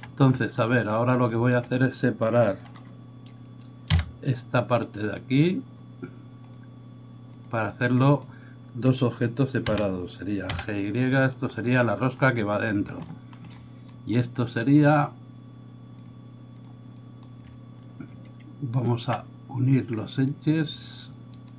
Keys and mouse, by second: 3.9 p, 6.5-11.6 drag, 9.6 g, 11.6-16.0 middle drag, 16.0-21.5 drag, 18.8 alt+right click, 21.3 alt+right click.